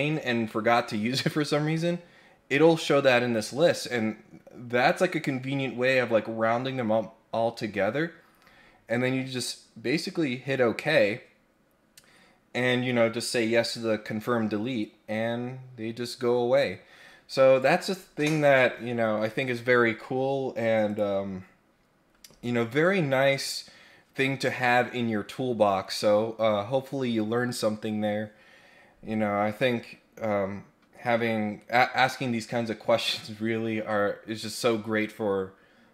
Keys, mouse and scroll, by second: 9.3 click, 20.8 click.